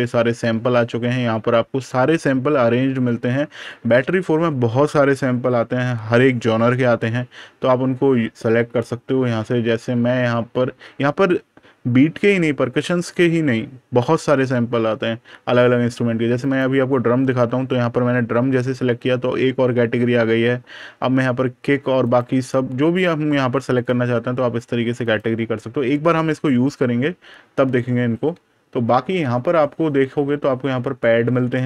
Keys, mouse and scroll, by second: 16.3 click, 21.9 click, 27.9 super+KP_Subtract, 28.9 super+KP_Add.